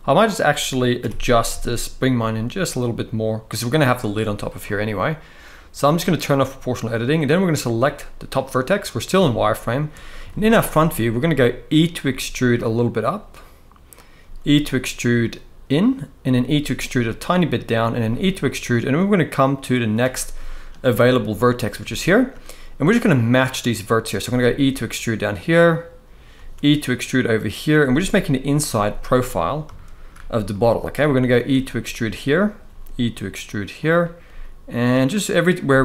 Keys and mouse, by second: 0.7 g, 1.2 x, 3.4 click, 5.5 click, 8.9-9.6 shift+middle drag, 10.0 shift+middle drag, 11.7 e, 13.9 e, 15.5 click, 15.9 e, 17.0 click, 17.7 e, 19.6 drag, 20.1 shift+middle drag, 21.6-22.0 shift+middle drag, 23.9 e, 25.3 click, 26.0 e, 27.0 click, 27.5 e, 28.3 click, 29.4 shift+middle click, 30.2 shift+middle click, 31.0 e, 32.3 e, 33.5 click, 34.0 e, 35.1 click.